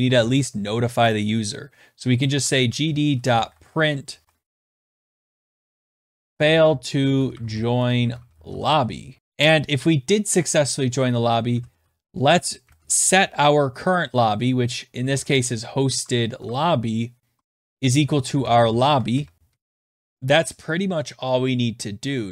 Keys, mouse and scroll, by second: 0.0-0.5 typing, 0.0 click, 1.7-9.7 typing, 11.0-12.8 typing, 14.4-19.8 typing, 16.1 Tab.